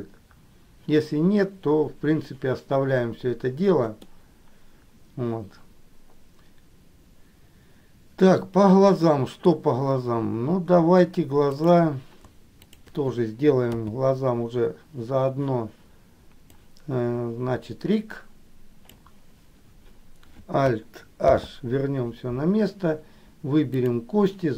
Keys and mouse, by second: 4.1-9.7 middle drag, 11.6 click, 12.8 shift+click, 13.8 KP_3, 16.8-19.1 drag, 21.4 alt+h, 23.9 click.